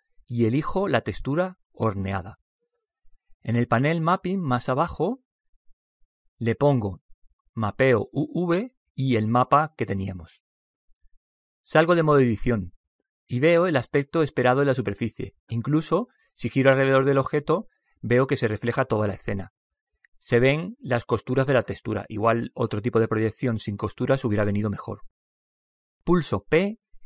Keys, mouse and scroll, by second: 3.8 click, 7.0 click, 9.7 click, 16.1-18.0 middle drag, 20.8-25.0 middle drag.